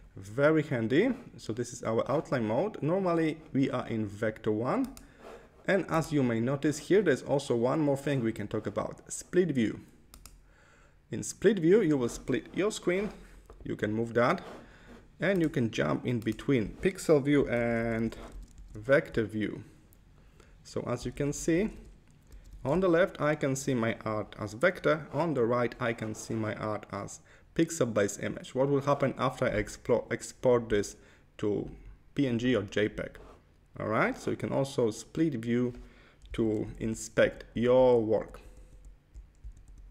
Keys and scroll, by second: 17.6 super+=, 18.8 super+=, 21.2 super+=, 36.5 super+-, 37.1 super+-, 38.3 super+-, 39.6 super+-.